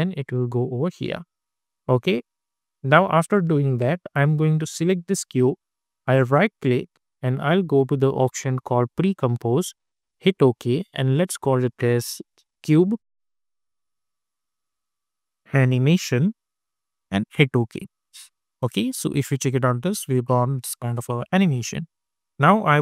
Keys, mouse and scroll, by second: 0.5 space, 1.6-3.2 drag, 6.1 right click, 10.1 click, 11.9-13.4 typing, 14.5-17.0 typing, 17.2 Return, 18.5 space, 20.6 space.